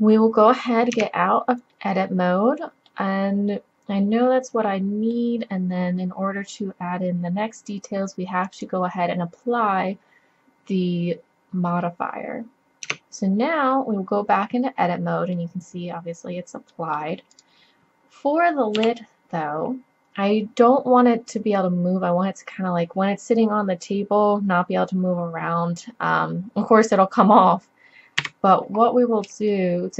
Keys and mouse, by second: 1.0 Tab, 6.4 middle drag, 8.5-10.4 drag, 11.4-12.8 middle drag, 12.9 Tab, 16.5 middle click, 16.7 middle click, 17.3-18.8 middle drag, 18.8 KP_3, 19.1-20.8 middle drag, 28.2 z, 28.8 middle click.